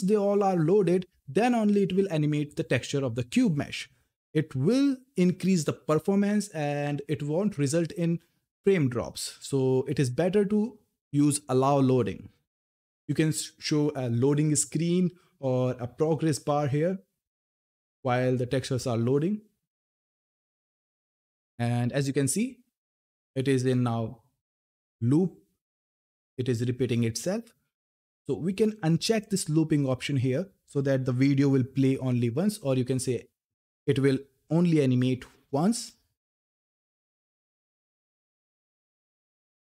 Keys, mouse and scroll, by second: 29.5 click, 31.5 ctrl+F10, 37.4-39.6 typing.